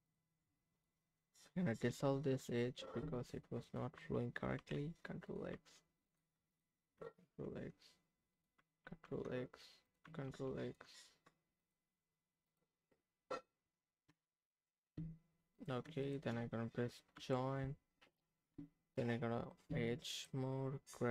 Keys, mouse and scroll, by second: 0.0 click, 0.7 click, 2.0 Tab, 3.6 click, 4.6 ctrl+x, 5.2 ctrl+click, 5.5 ctrl+x, 6.1 ctrl+click, 6.5 click, 7.2 ctrl+x, 8.3 click, 8.8 ctrl+x, 9.9 click, 10.2 ctrl+x, 10.6 ctrl+click, 11.6 click, 12.4 click, 14.1 Tab, 15.5 click, 16.0 shift+click, 17.2 j, 18.0 click, 18.6 Tab, 20.1 click.